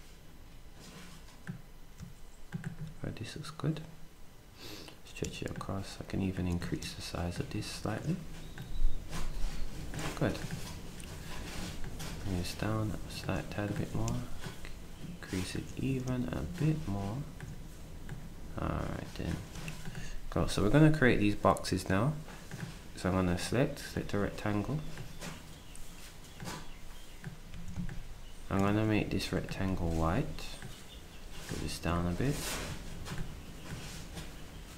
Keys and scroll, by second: 27.5 s, 28.7 d, 29.7 s.